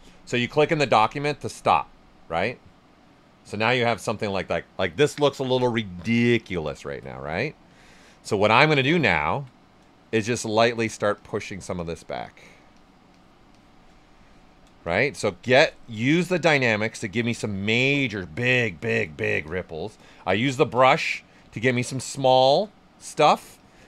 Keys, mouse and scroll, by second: 2.9-4.9 right drag, 6.9 ctrl+right click, 8.9 alt+right click, 11.0 shift+click, 14.0 right click, 14.8 shift+click, 16.5 right click, 17.1 shift+click, 19.1 alt+right click, 20.9 alt+shift+right click, 21.6 shift+click, 22.9 alt+shift+right click, 23.1 right click, 23.5 shift+click.